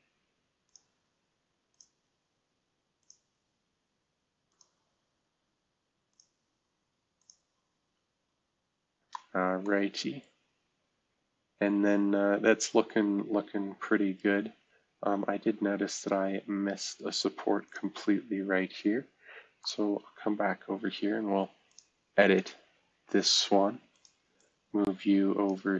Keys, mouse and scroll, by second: 0.7-5.2 drag, 6.2-9.2 drag, 9.2 scroll down 1, 10.2-12.6 middle drag, 12.6 right click, 12.7-13.7 middle drag, 13.7-16.4 right drag, 17.7-19.2 drag, 19.6 drag, 21.7 click, 22.4 click, 23.9 click, 24.4-25.5 drag.